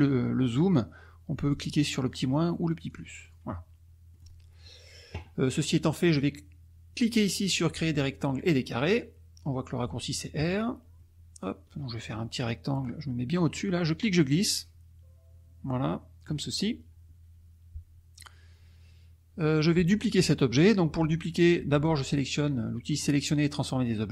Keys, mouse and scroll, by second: 2.0 click, 2.8 click, 3.2 click, 4.1 middle click, 4.1 scroll up 1, 4.6 middle click, 10.3 click, 11.0 middle click, 13.9-16.4 drag.